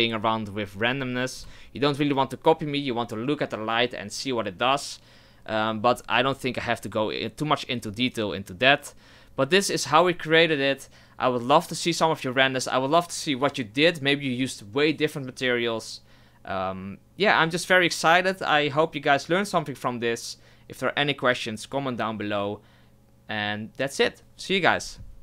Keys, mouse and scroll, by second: 1.4 KP_0.